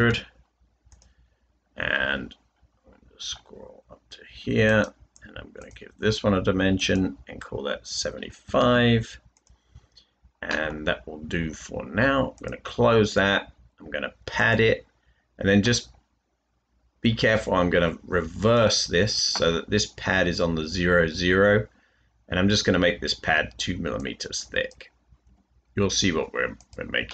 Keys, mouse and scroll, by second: 0.0-0.4 typing, 8.4 typing, 25.2 typing.